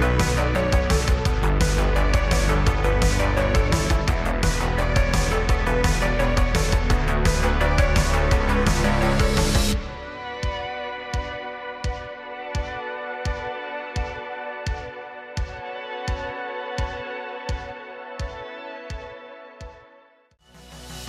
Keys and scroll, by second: 0.6 r, 2.5 g, 4.1 Tab, 5.3 r, 6.9 r, 8.2 g, 9.6 s, 11.1 r, 12.7 g, 13.8 r, 14.9 Tab, 17.1 shift+d, 17.6 shift+d, 18.8 shift+d, 19.2 shift+d.